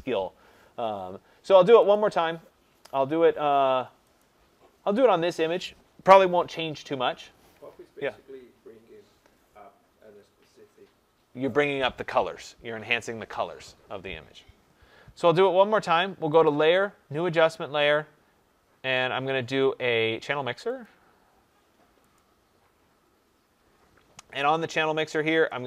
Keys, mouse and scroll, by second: 1.9 click, 4.1 click, 16.4 click, 20.8 click, 22.1 click.